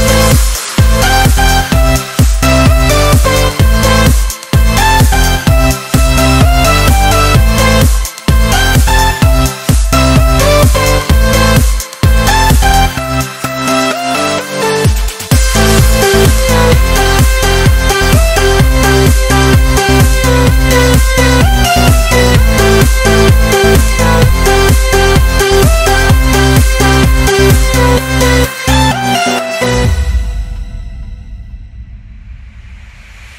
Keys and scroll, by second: 0.4 ctrl++, 0.8 ctrl+z, 1.8 ctrl+z, 3.5 ctrl+-, 4.3 ctrl+-, 4.7 ctrl++, 6.4 ctrl++, 6.9 ctrl+z, 7.3 ctrl+z, 13.5 ctrl+z, 20.1 ctrl+z, 21.2 ctrl+-, 25.2 ctrl+z, 28.4 ctrl+z, 28.9 ctrl+z, 32.3 ctrl+-, 32.6 ctrl+-.